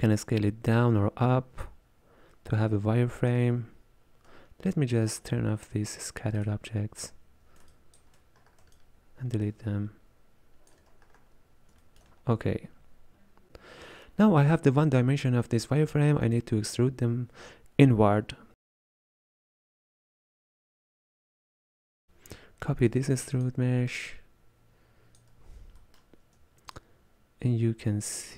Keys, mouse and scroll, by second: 0.1-2.8 shift+drag, 6.4 click, 7.7 ctrl+click, 8.4-8.7 scroll down 3, 8.8-10.9 ctrl+drag, 10.9-11.8 scroll up 4, 11.8-20.4 shift+middle drag, 20.4-22.7 drag, 22.7 shift+d, 25.2 click, 27.2-28.3 shift+drag.